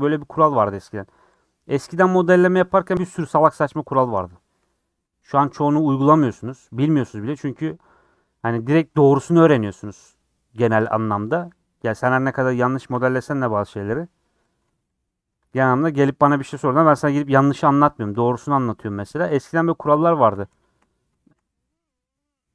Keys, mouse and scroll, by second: 0.1 scroll up 3, 0.9 Left, 1.3 Left, 1.8-3.8 middle drag, 4.6 3, 5.1 2, 5.2 click, 6.6 shift+click, 7.5-8.5 middle drag, 8.5 click, 10.6 click, 11.5 shift+click, 12.1 shift+click, 12.8 shift+click, 13.3-14.5 middle drag, 14.5 click, 15.7 shift+click, 15.9-17.1 shift+middle drag, 17.1 shift+click, 18.1 click, 19.2 shift+click, 19.6-21.4 middle drag, 21.4 scroll up 2, 21.6 middle click, 22.2-22.5 scroll up 2.